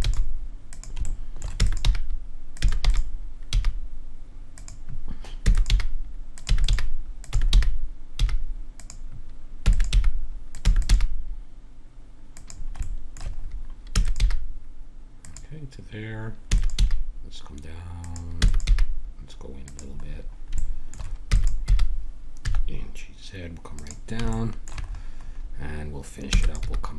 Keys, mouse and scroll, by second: 0.1 g, 1.1 middle click, 1.6 e, 1.9 g, 2.6 e, 3.4 g, 5.4-7.3 typing, 9.6 e, 9.9 g, 10.6 e, 10.9 g, 12.8 middle click, 13.9 e, 14.2 g, 15.0-16.5 drag, 16.5 e, 16.8 g, 18.4 e, 18.7 g, 20.8 middle click, 21.3 e, 21.7 g, 22.4-24.3 drag, 26.3 e, 26.6 g.